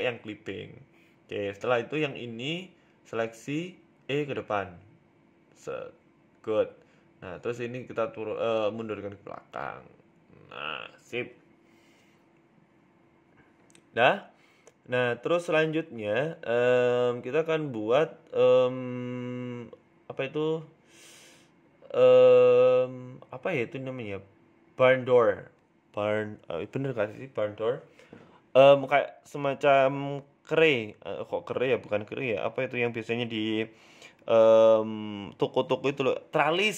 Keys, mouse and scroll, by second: 0.8 e, 1.6-2.1 scroll down 12, 2.1 shift+middle click, 2.4-2.8 scroll up 4, 2.6 middle click, 2.8 scroll down 1, 3.4 right click, 4.0 shift+right click, 4.4 KP_3, 5.0-5.4 scroll up 1, 5.4 e, 7.8 scroll down 4, 7.9 Tab, 8.6 click, 9.2 g, 10.9 g, 13.4 z, 13.9 middle click, 15.3-15.9 scroll down 3, 15.5 shift+middle click, 17.3 middle click, 17.9 KP_1, 18.3 shift+middle click, 18.8 z, 20.1 shift+middle click, 20.9 shift+a, 25.5-25.9 scroll up 2, 25.9 g, 27.4 s, 28.4 s, 29.2-29.6 scroll up 4, 29.5 shift+middle click, 29.7 scroll down 2, 30.4 Tab, 30.4 scroll down 1, 30.6 click, 30.9-31.8 scroll up 4, 31.3 g, 32.0 shift+middle click, 32.7 g, 34.0 shift+middle click, 34.4-34.7 scroll down 2, 35.0 Tab, 35.4 Tab.